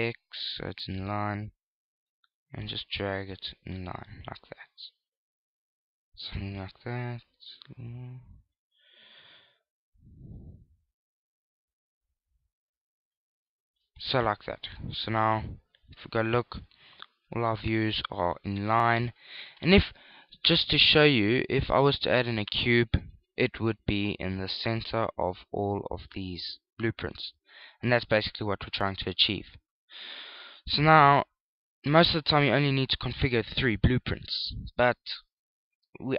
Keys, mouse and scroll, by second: 2.8 click, 10.9 click, 15.8-20.2 typing, 23.9-28.4 typing, 29.6 right click, 30.4 right click, 32.4 click.